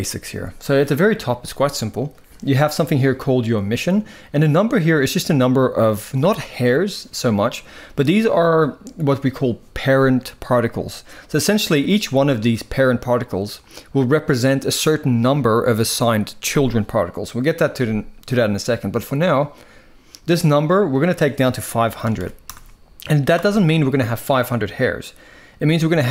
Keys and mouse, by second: 20.6-23.1 drag, 21.9 typing.